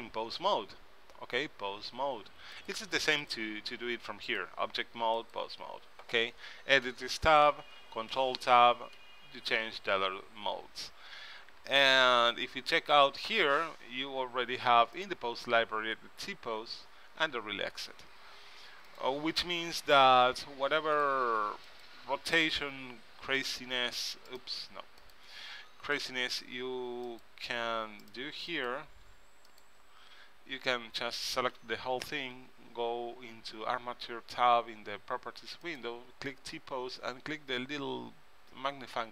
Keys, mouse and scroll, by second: 2.6 middle click, 2.7-6.3 drag, 7.1 Tab, 7.6 Tab, 8.3 ctrl+Tab, 9.1 ctrl+Tab, 13.0-14.7 drag, 14.7 middle click, 15.1-16.7 drag, 16.7 right click, 16.9 click, 19.0-20.8 drag, 20.1 r, 20.7 middle click, 21.8-23.8 drag, 22.1 r, 23.5 middle click, 23.8 r, 25.6 r, 27.6 r, 28.7-30.6 drag, 29.2 r, 31.5 a, 31.7 a, 35.8-37.7 middle drag, 37.5 click.